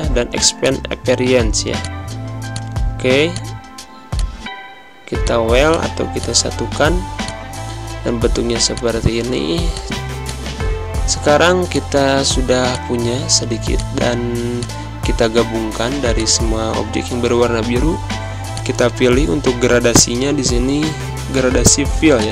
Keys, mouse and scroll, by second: 0.6 click, 5.9 z, 6.1 click, 10.9 ctrl+z, 11.6 shift+click, 18.5 click, 20.5 g, 22.1 click.